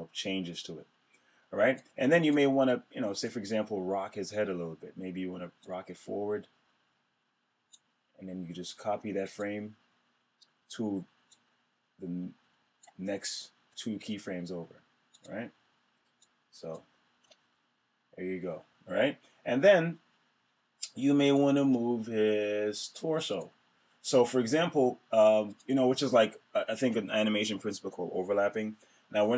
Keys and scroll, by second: 16.9 Return.